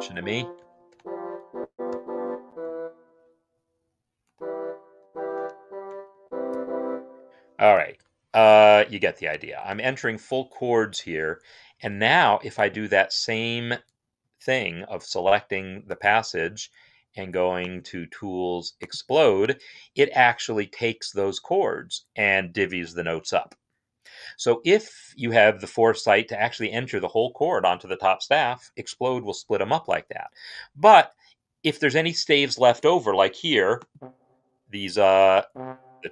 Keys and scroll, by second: 1.2 Right, 6.3 ctrl+Down, 7.5 shift+c, 10.7 BackSpace.